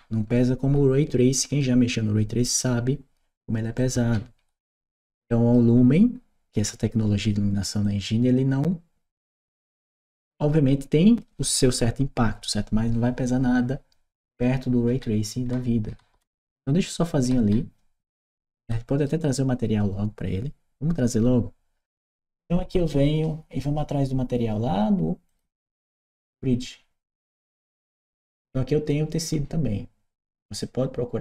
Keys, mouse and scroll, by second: 3.6-5.4 right drag, 7.7-9.9 drag, 14.0-18.9 right drag, 17.1 w, 25.1 click, 27.3 click.